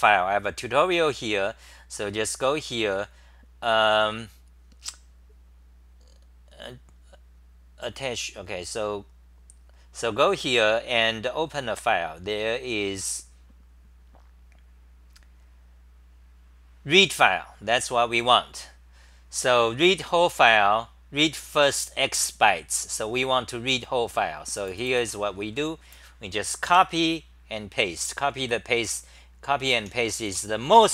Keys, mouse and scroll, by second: 30.0-30.9 typing.